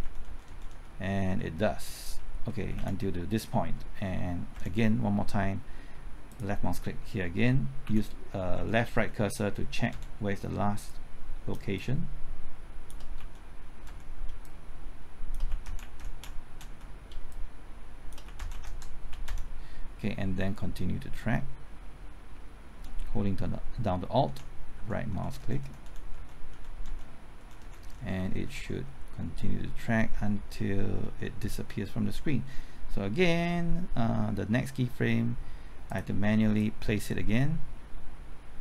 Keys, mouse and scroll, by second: 0.5-1.2 typing, 2.7 Left, 4.5 Right, 6.3 click, 7.8 Left, 8.5-9.9 typing, 10.8 click, 11.7 shift+click, 13.2 shift+Left, 13.8 shift+Right, 14.4 shift+click, 15.5 shift+Left, 15.6 shift+Right, 15.8 shift+Left, 16.0 shift+Right, 16.2 shift+Left, 16.6 Right, 17.3 shift+click, 18.2 shift+Left, 18.3 shift+Right, 18.5 shift+Left, 19.1 shift+Left, 19.2 Right, 22.9-25.6 typing, 25.1 alt+Right, 25.6 alt+Right, 31.5 Left, 34.2-35.0 typing, 35.8-38.6 drag.